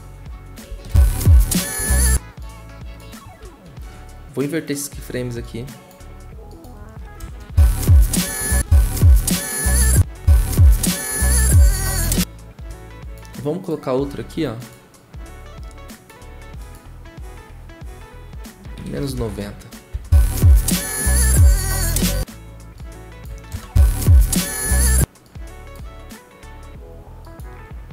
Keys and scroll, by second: 0.7 0, 1.8 0, 18.5-19.9 typing, 21.3-22.0 typing, 23.5 0.